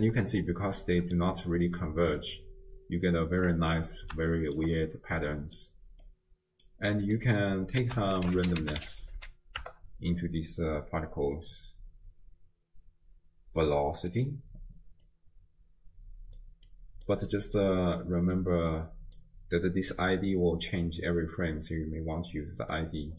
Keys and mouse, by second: 2.3-4.2 drag, 4.2 shift+middle drag, 4.4 shift+middle click, 4.8-5.7 middle drag, 6.0 middle click, 6.4 click, 7.1 click, 7.8 ctrl+a, 9.2 s, 15.1-16.4 drag, 16.7 click, 16.9 click, 17.3 click, 18.0 click, 18.7 click, 19.0 click, 21.0-22.8 drag.